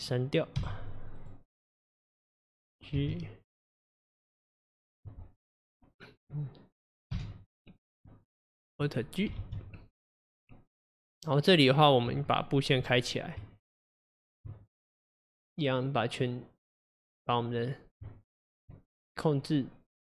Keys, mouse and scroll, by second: 0.0 click, 0.6 x, 2.1 click, 3.0 g, 6.3 click, 7.2 x, 8.4 click, 9.4 alt+g, 10.3 click, 12.4 Tab, 13.5 Tab, 18.1 Tab, 19.0 click.